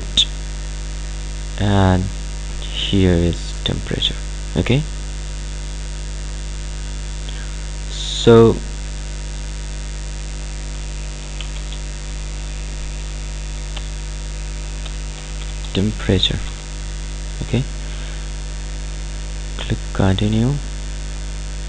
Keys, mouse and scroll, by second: 11.3 shift+Num_Lock, 11.6 e, 13.8-17.0 typing, 19.7 click.